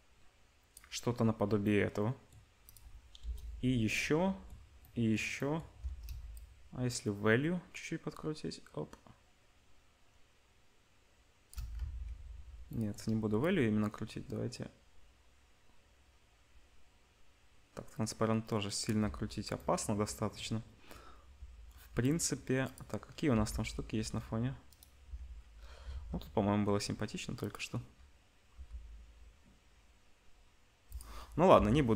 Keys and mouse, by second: 2.6 click, 2.7-6.3 middle drag, 3.2 KP_0, 6.3-22.7 shift+drag, 11.8 ctrl+z, 22.7-28.5 middle drag, 23.3 g, 25.8 shift+d, 28.5 g, 31.5 Delete.